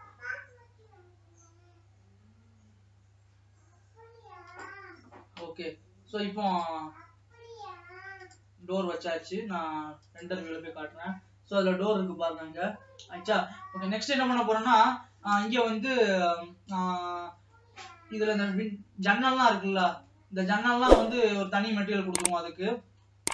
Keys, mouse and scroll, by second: 8.4 click, 11.6-13.9 scroll up 1, 17.7-18.9 middle drag, 18.9-19.6 scroll up 4, 19.6-21.4 middle drag, 21.4 scroll down 1, 21.5-22.9 middle drag, 22.9-23.2 scroll down 5, 23.2 middle click.